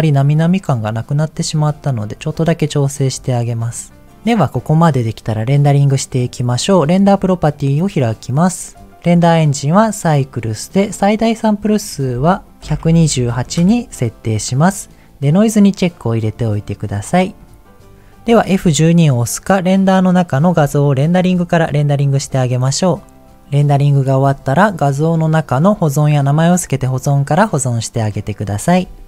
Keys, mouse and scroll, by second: 1.1 click, 2.7-3.7 scroll down 2, 3.7 click, 7.0 click, 11.7-13.5 drag, 21.1-22.3 drag.